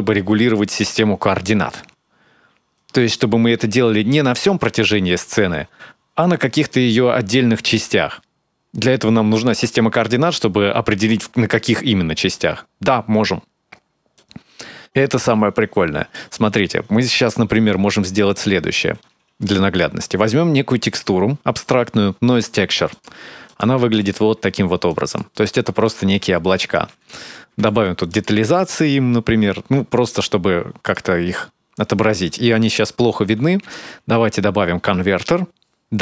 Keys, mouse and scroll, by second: 13.9 click, 17.1 middle click, 19.6 shift+a, 23.8 ctrl+shift+click, 24.7 click, 25.2-26.5 scroll up 3, 25.6 middle click, 26.5 click, 28.7 click, 32.1 click, 33.4 shift+a, 35.7-36.0 scroll up 7.